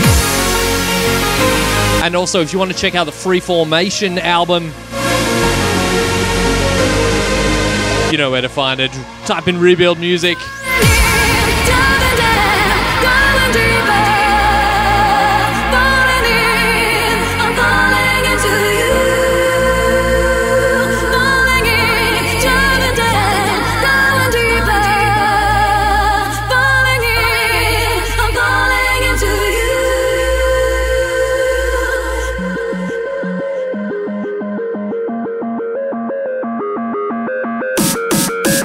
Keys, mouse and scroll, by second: 11.9 s, 14.6 s, 16.1-18.8 drag, 16.5 s, 17.9 s, 19.1 drag, 19.1 s, 19.9-21.2 drag, 20.2 s, 21.2 s, 22.3 s, 23.4 s, 24.8 s, 26.5 s, 27.7 click, 28.2 s, 29.8 s, 32.0 g, 36.3-37.5 middle drag.